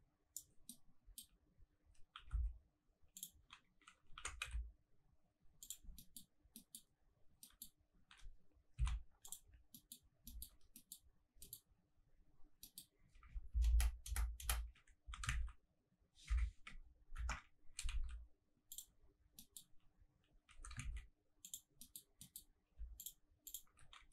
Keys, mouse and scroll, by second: 0.7 middle click, 2.2 e, 2.3 s, 3.2 click, 4.1 e, 4.4 z, 5.6 click, 5.8-6.5 scroll down 3, 5.9 middle click, 6.5 middle click, 6.8-7.4 scroll up 3, 7.4 middle click, 7.9 scroll up 1, 8.1 g, 8.7 z, 9.2 click, 9.4 scroll down 2, 9.7 middle click, 10.0 scroll up 1, 10.2 shift+middle click, 10.7 middle click, 11.1-12.2 scroll up 5, 11.4 middle click, 12.2 scroll down 1, 12.6 middle click, 12.8-13.2 scroll down 1, 13.5 ctrl+KP_Add, 13.7 ctrl+KP_Add, 14.1 ctrl+KP_Add, 14.4 ctrl+KP_Add, 15.0 s, 15.2 shift+z, 16.2 Escape, 17.1 ctrl+KP_Subtract, 17.6 s, 18.0 shift+z, 18.7 click, 18.9-19.4 scroll down 3, 19.4 middle click, 19.7-20.5 scroll up 2, 20.5 s, 20.9 shift+z, 21.4 click, 21.8 middle click, 22.0 scroll up 1, 22.2 middle click, 23.0 alt+click, 23.4 alt+click, 23.9 g.